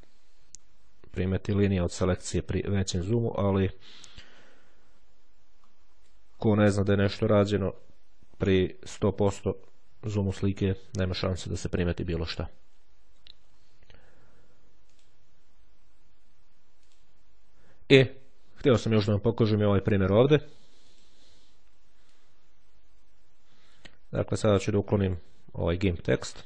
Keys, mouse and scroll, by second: 0.3-1.1 ctrl+scroll down 1, 1.1-2.7 scroll up 2, 3.4-3.8 scroll down 2, 4.2-5.2 shift+scroll down 2, 5.4-6.1 shift+scroll up 3, 6.1-6.6 ctrl+shift+scroll down 3, 6.9-7.4 ctrl+scroll down 2, 8.7-9.2 ctrl+shift+scroll up 3, 14.3-15.4 drag, 16.4 click, 20.7 click, 22.0-25.5 drag.